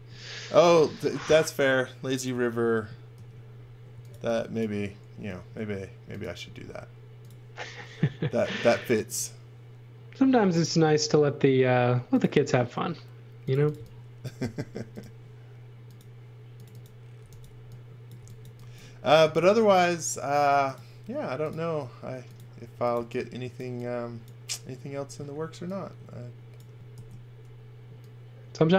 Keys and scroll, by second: 3.1-5.3 typing, 13.3-14.4 typing, 16.9-19.2 typing, 22.4-23.4 typing, 25.1 space, 26.9 shift+1.